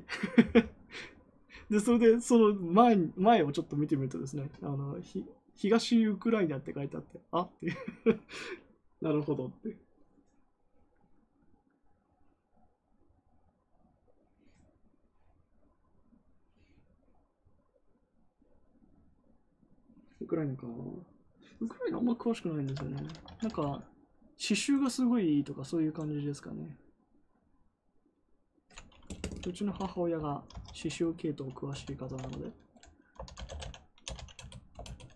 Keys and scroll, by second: 29.6 u, 30.1 BackSpace, 30.3 BackSpace, 31.4-35.1 typing, 34.7 Return.